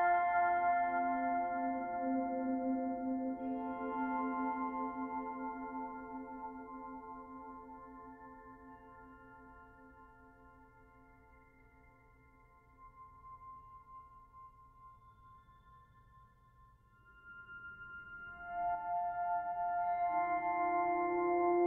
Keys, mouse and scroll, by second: 0.3 middle click, 0.3-0.6 scroll up 5, 0.6 Tab, 0.7 middle click, 1.0 scroll up 2, 1.2 shift+middle click, 1.8 click, 2.1 l, 2.5 l, 3.0 l, 3.5 g, 5.3 g, 6.4 click, 6.8 l, 7.1 l, 7.5 g, 9.0 Tab, 9.1-9.5 scroll down 11, 9.5 b, 10.0 o, 13.4-14.0 scroll up 7, 14.0 click, 14.2 scroll up 4, 14.3 Tab, 14.6 click, 14.7 3, 15.2 click, 15.8 scroll down 7, 16.3 scroll up 3, 16.7 g, 17.4 ctrl+s, 17.6-18.2 scroll down 8, 17.8 Tab, 18.2 b, 18.5 o, 20.0 ctrl+s.